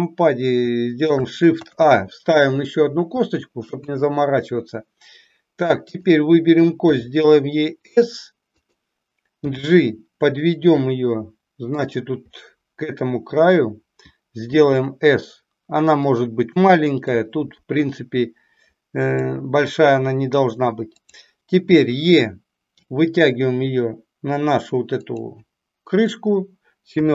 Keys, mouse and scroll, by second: 1.6 shift+a, 3.7 KP_1, 5.9 click, 6.8 s, 9.4 g, 14.4 s, 17.1-19.2 drag, 20.9 click, 22.8 e, 26.8 KP_7.